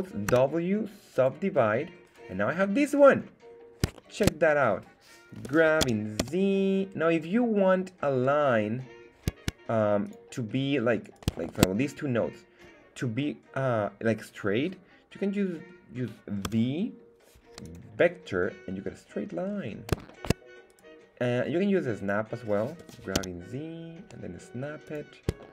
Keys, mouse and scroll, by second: 0.3 w, 2.0 right click, 2.6 scroll up 1, 3.1 scroll up 2, 3.9 shift+middle click, 5.4 g, 5.8 x, 6.2 z, 10.0 click, 11.0 right click, 11.4 shift+right click, 19.4-19.9 scroll up 2, 20.0 shift+middle click, 20.7 right click, 22.8 g, 23.1 z, 24.8 click, 25.4 shift+middle click.